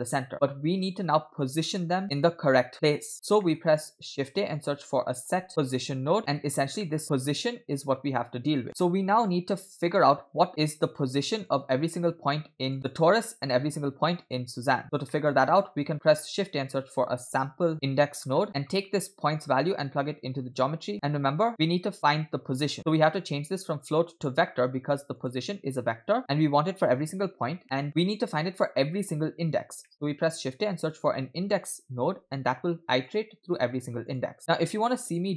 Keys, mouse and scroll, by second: 3.1 scroll down 2, 3.4 middle click, 3.7 scroll up 2, 4.0 shift+a, 6.2 click, 6.8 middle click, 7.8-8.7 drag, 8.7 middle click, 8.7 scroll down 2, 8.8 click, 10.5 click, 11.4-12.8 drag, 12.8 scroll up 2, 12.8 click, 13.3 middle click, 13.6-14.2 scroll up 2, 14.2 click, 14.8 scroll down 2, 15.1 middle click, 15.6 shift+a, 19.3-20.7 drag, 20.9 middle click, 20.9-21.5 scroll up 4, 22.9 middle click, 23.1 scroll up 1, 23.8-25.4 drag, 27.6 middle click, 29.9 middle click, 30.2 shift+a, 34.4 click, 35.2 click.